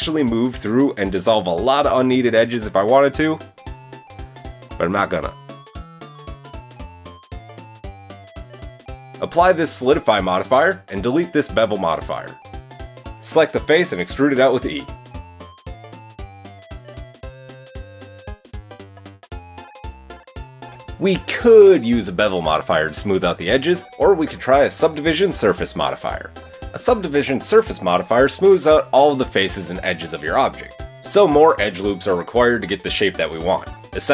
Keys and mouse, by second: 1.3-3.4 middle drag, 2.8 x, 3.4 drag, 5.4 middle click, 5.6 Tab, 5.8 middle click, 7.1 middle click, 7.5 click, 7.6-9.6 middle drag, 8.1 Tab, 9.6-11.2 drag, 11.9-18.2 drag, 13.3 middle click, 13.3 right click, 14.2 KP_3, 15.6 e, 16.4 g, 18.2-21.3 middle drag, 19.4 Tab, 21.3 drag, 21.3-23.2 middle drag, 23.2 click, 23.3-24.8 middle drag, 23.5 Tab, 24.0 Tab, 24.8-28.3 drag, 28.7 Tab, 33.3 click, 33.8 shift+click.